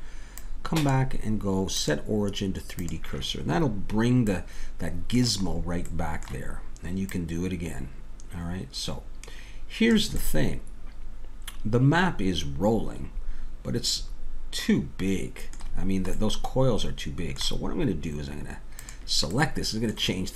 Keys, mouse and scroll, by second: 0.4-4.4 drag, 4.4-7.1 middle drag, 7.1-9.0 drag, 10.2-12.2 middle drag, 15.8-18.8 middle drag, 18.8-20.3 drag.